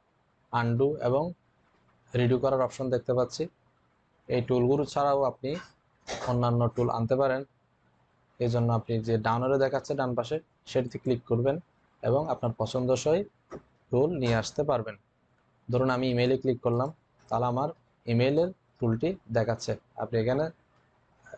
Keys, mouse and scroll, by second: 10.8 click, 16.6 click, 16.6 click.